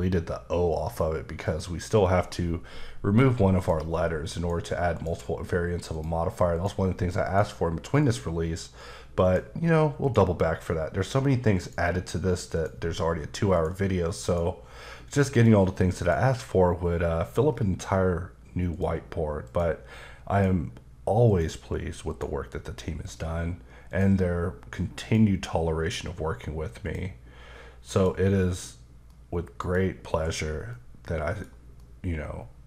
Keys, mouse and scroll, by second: 1.4 click, 3.5 click, 4.3 click, 4.9 click, 5.9 click, 6.5 click, 7.2 click, 8.0 click, 10.0 click, 10.5-11.6 scroll down 1, 11.6 click, 12.5 click, 13.5 click, 15.3 click, 16.8-17.4 scroll down 3, 17.4-18.7 scroll down 2, 18.7 scroll down 1, 19.4 click, 20.3 click, 21.3 click, 22.1 click, 23.9 click, 25.0 click, 25.8-26.3 scroll down 2, 26.8 click, 27.9 click, 29.1 middle click, 30.1 KP_Decimal, 30.7 middle click, 31.8 middle click.